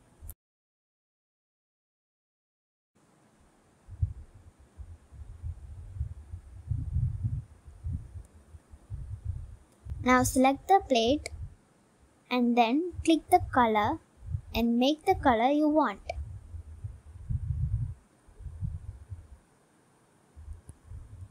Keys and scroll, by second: 2.8 g, 5.2 ctrl+z.